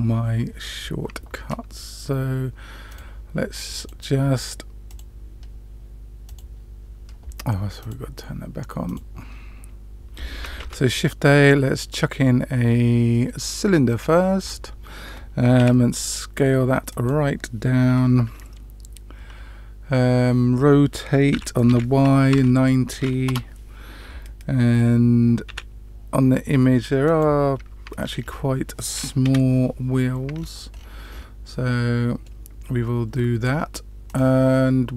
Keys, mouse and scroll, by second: 2.9 click, 3.9 click, 4.8 click, 6.2 click, 7.8 click, 8.8 click, 10.5 shift+a, 15.9 s, 21.3 r, 25.4 s, 28.1 scroll down 1, 28.2-28.5 scroll up 2, 29.2 KP_Decimal, 30.3-31.2 scroll down 4, 31.2 scroll up 1, 31.5-32.3 middle drag, 34.0 click.